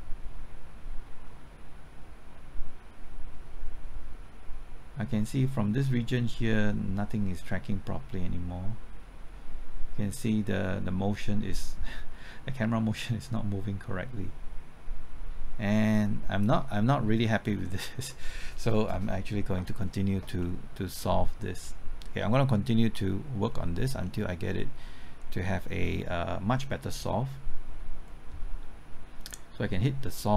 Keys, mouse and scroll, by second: 20.4-21.4 middle drag, 23.4 scroll up 1, 24.0-24.3 scroll down 1.